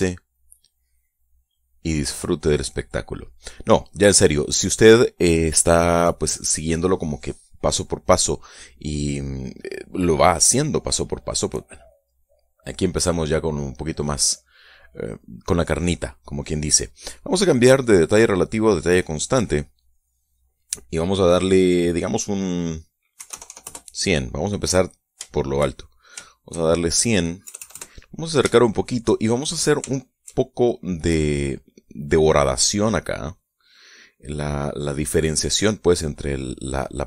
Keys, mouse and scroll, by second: 0.0 click, 0.9 click, 1.6 right click, 2.4 Escape, 3.8 click, 4.7 click, 12.1-13.2 drag, 14.0-15.1 middle drag, 15.4 middle click, 18.2 click, 19.2 click, 19.9 click, 23.6 KP_1, 23.7 KP_0, 24.0 KP_Enter, 24.8 click, 25.5 shift+middle click, 26.6 shift+middle click, 27.8 KP_Add, 29.0 shift+middle click, 29.5 shift+click, 30.4 shift+middle click.